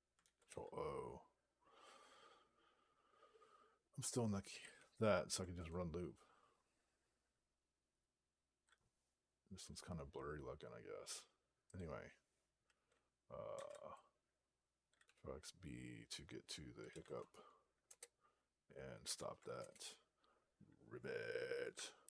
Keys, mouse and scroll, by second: 4.6 alt+p, 5.4 Return, 11.6 click, 16.5-17.3 typing, 17.7 Return, 19.0 alt+p, 19.4 Return.